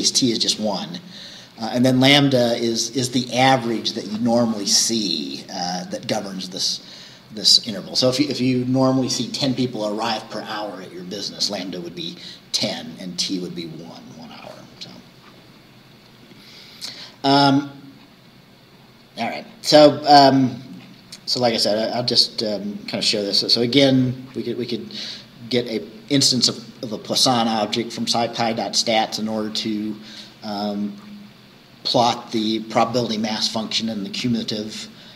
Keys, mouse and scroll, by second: 15.8-16.2 scroll down 2, 16.8-17.1 scroll down 2, 17.6-19.2 scroll down 6, 19.5-19.8 scroll up 2, 20.9-21.2 scroll up 2.